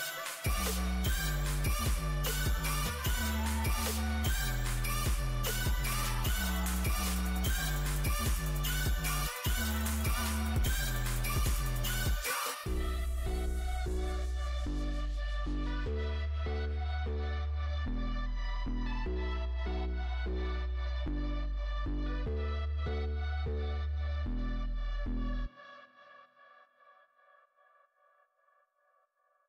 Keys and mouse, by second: 0.2 Tab, 2.4 Tab, 3.6 ctrl+r, 7.0 click, 7.7 ctrl+r, 10.0 Tab, 13.5 Tab, 20.3-22.6 drag, 22.6 z, 23.0 Tab, 23.4 a, 23.6 a, 24.8 Tab, 25.2 a, 25.5 a, 28.7 z.